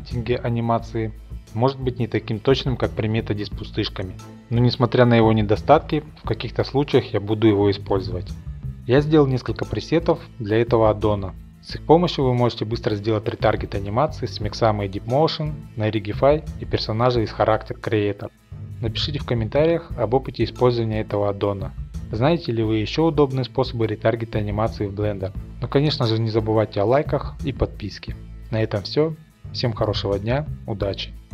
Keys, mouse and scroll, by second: 0.1 middle click, 1.5 click, 2.7 middle click, 3.5 middle click.